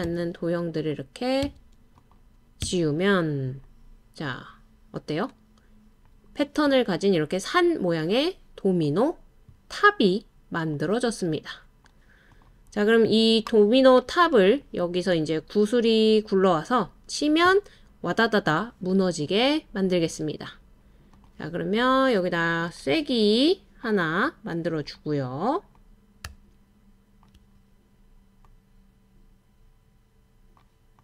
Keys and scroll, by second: 0.0 BackSpace, 1.4 BackSpace, 2.6 BackSpace.